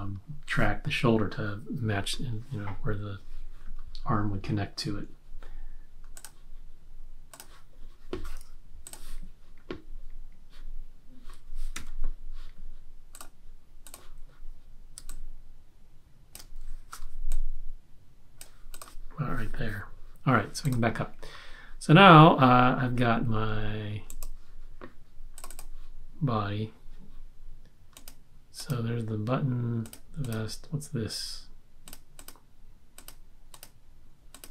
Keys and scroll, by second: 11.7 x, 16.9 v.